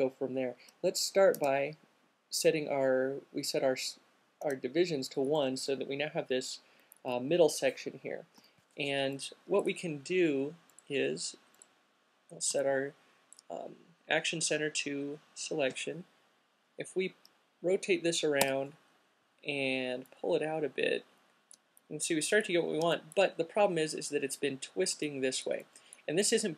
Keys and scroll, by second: 0.9 space, 1.6 space, 4.6 space, 7.5 e, 18.6 w.